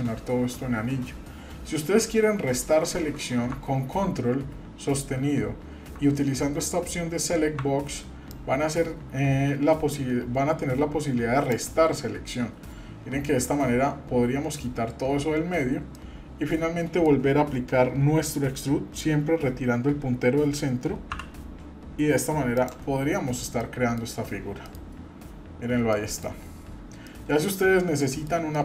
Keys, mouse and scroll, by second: 8.3-11.5 ctrl+drag, 15.9-17.0 middle drag, 21.1 e, 23.1-23.6 scroll down 1, 23.6 middle click, 24.2 scroll down 1, 24.6 middle click, 25.0-25.4 scroll down 2, 25.4-25.7 scroll up 2, 25.9 shift+middle click, 26.4-26.8 scroll up 1, 27.0 shift+middle click, 27.7-28.0 scroll up 2, 28.0 shift+middle click, 28.5 middle click.